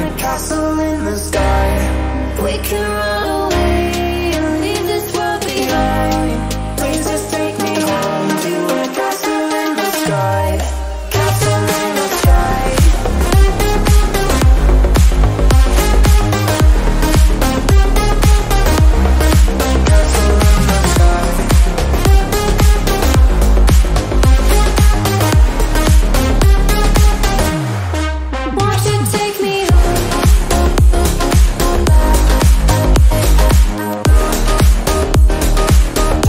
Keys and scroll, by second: 0.4 c, 13.6 v, 14.3 Down, 14.5 Down, 14.9-21.0 Down, 21.2 Down, 21.3 Down, 21.5 Down, 29.6 b.